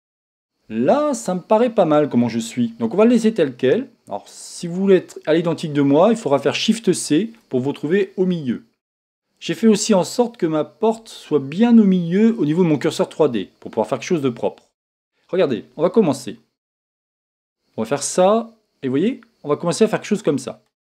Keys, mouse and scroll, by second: 6.1-6.5 scroll down 1, 6.5-7.7 scroll up 1, 17.6-20.8 drag.